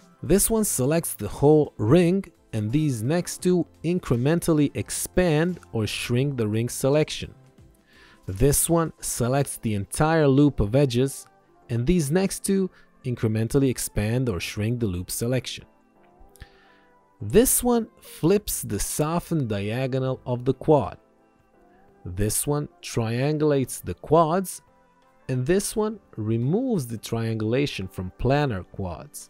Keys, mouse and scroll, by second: 17.2 alt+y, 18.1 click, 21.9 ctrl+1, 22.4 click.